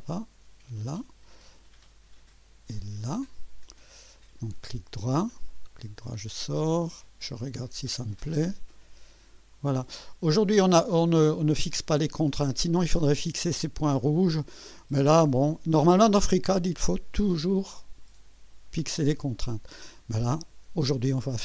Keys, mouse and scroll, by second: 0.8 click, 2.7 click, 4.2 right click, 5.5 right click, 8.1-11.3 drag.